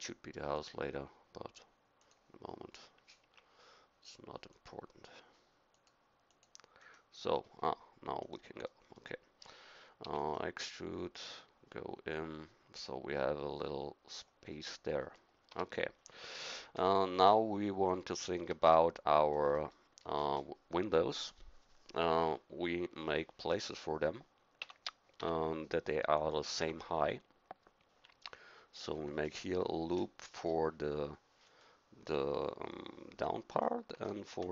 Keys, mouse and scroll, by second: 3.2 Escape, 6.8-10.0 middle drag, 10.0 e, 14.6 middle click, 15.5 a, 17.1 KP_1, 18.4 Tab, 24.6 Tab, 25.2 Tab, 26.6 Tab, 28.8 ctrl+r, 34.1 ctrl+r.